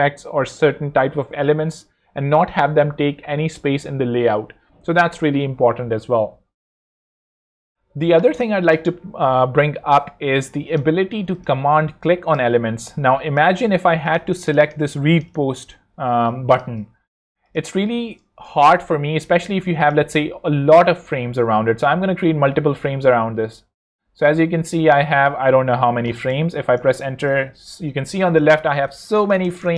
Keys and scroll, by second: 11.2 z, 13.1 space, 16.1 space, 18.5 super+0, 19.3 alt+super+z, 22.1 alt+super+g, 26.3 Return.